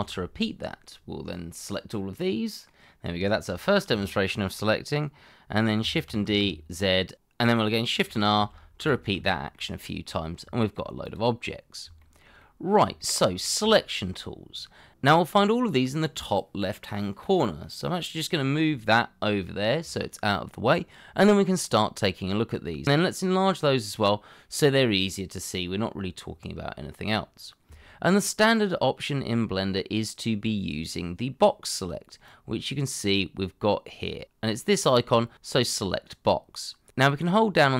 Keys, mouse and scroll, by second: 0.3 scroll down 1, 0.6 middle click, 3.2 shift+middle click, 3.6-4.0 scroll up 1, 4.0 shift+middle click, 6.1 shift+d, 6.4 z, 7.4 scroll down 1, 8.8 shift+r, 9.7 scroll down 1, 9.9 shift+middle click, 10.2-10.5 scroll up 1, 10.5 middle click, 10.9 shift+middle click, 12.0-12.3 shift+scroll down 1, 12.4 middle click, 13.3-13.7 scroll up 1, 13.7 shift+middle click.